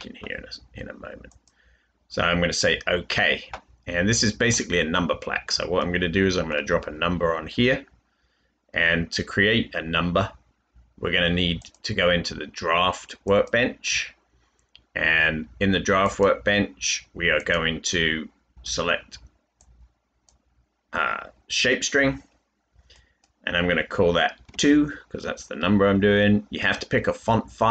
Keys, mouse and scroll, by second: 24.4 typing.